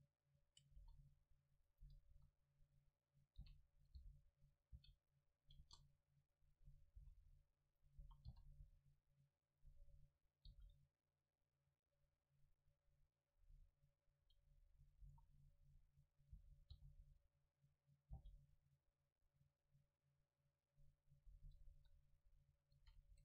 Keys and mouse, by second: 0.8 s, 1.9-3.9 drag, 2.1 KP_7, 3.5 r, 4.0 g, 4.7 click, 4.8 r, 5.6 KP_0, 7.0 s, 7.8-9.5 drag, 8.0 s, 9.6-11.3 drag, 10.5 g, 14.7-19.8 drag, 15.1 s, 16.4 s, 18.2 g, 20.7-22.8 drag, 21.7 KP_7, 22.8 shift+d.